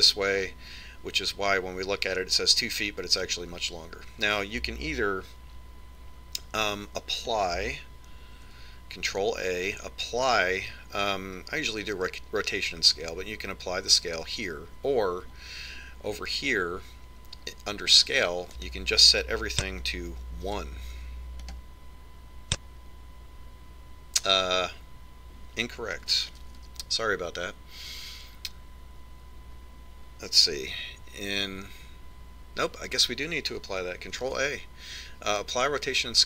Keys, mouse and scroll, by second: 9.3 ctrl+a, 19.5 click, 27.5 ctrl+z, 31.7 Tab, 32.6 Tab, 35.2 ctrl+a.